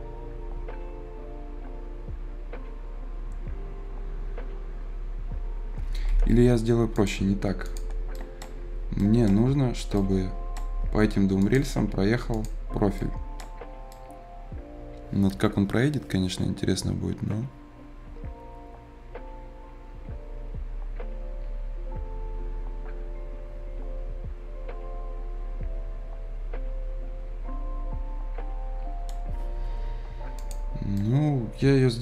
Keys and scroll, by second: 6.0 Escape.